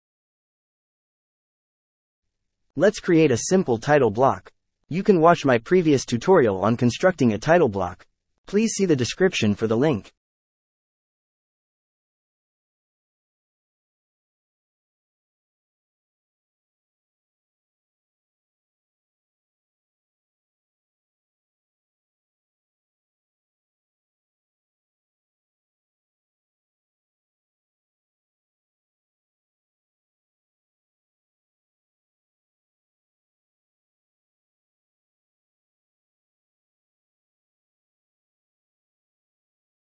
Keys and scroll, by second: 3.0 l, 3.4 Return, 10.4 KP_1, 10.5 ., 12.4 ., 12.6 KP_3, 13.2 Return, 14.7 5, 15.0 Return, 16.8 space, 18.5 l, 18.8 space, 23.2 KP_1, 23.3 Return, 25.0 space, 29.4 h, 29.8 space, 31.2 w, 31.5 space, 33.9-37.1 typing, 37.3 ctrl+a, 38.9 KP_0, 38.9 KP_Decimal, 39.2 KP_2, 39.5 Return.